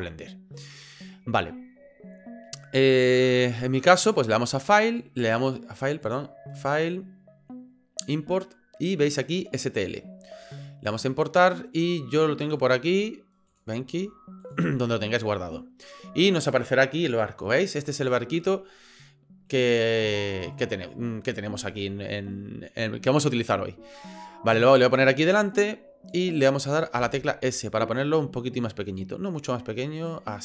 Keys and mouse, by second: 4.7-5.5 drag, 6.0-11.1 drag, 19.0 middle click, 20.3-21.4 shift+middle drag, 24.8-26.1 drag, 27.0 s.